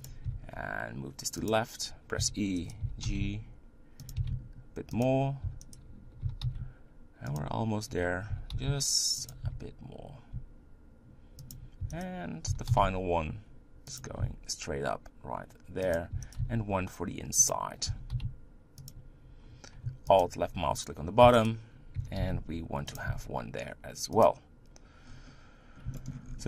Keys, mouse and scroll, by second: 0.6 s, 2.2 e, 2.8 g, 4.2 s, 5.4 e, 6.2 g, 8.3 g, 9.5 s, 11.8 e, 12.5 g, 14.2 s, 16.1 e, 17.9 g, 20.2 alt+click, 21.2 e, 22.0 g, 23.1 s, 25.0-26.0 scroll down 3, 26.0 shift+middle click, 26.2 scroll up 5.